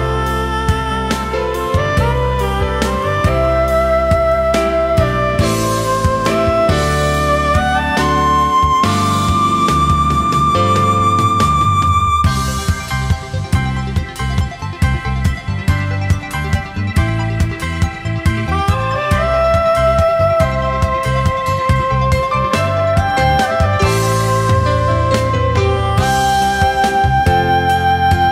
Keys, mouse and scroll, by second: 5.7 ctrl+z, 6.7 shift+click, 10.4-10.8 alt+scroll down 1, 10.9 space, 11.9 alt+scroll up 1, 12.6 space, 13.4-15.1 alt+scroll up 1, 16.3-17.0 alt+scroll up 1, 17.3 alt+click, 20.3 alt+scroll up 1.